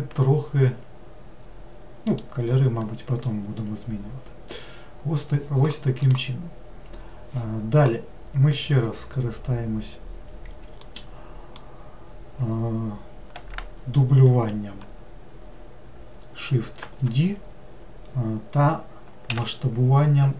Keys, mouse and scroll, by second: 10.8-13.9 middle drag, 16.8 shift+d.